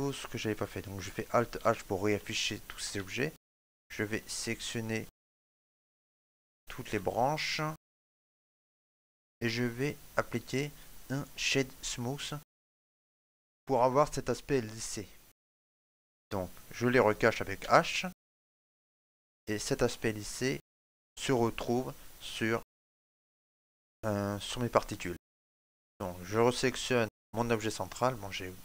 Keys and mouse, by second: 1.5 alt+h, 2.2 ctrl+middle click, 2.9 shift+middle click, 3.3 middle click, 3.9 right click, 5.2 shift+right click, 6.4 ctrl+middle click, 6.9 middle click, 7.4 shift+middle click, 8.3 shift+right click, 9.1 ctrl+middle click, 9.6 click, 10.0 click, 17.4 h, 18.1 middle click, 18.6 ctrl+middle click, 19.3 shift+middle click, 19.9 ctrl+middle click, 22.6 shift+middle click, 23.2 ctrl+middle click, 23.7 middle click, 25.0 shift+middle click, 26.2 right click, 26.9 shift+middle click, 27.4 middle click.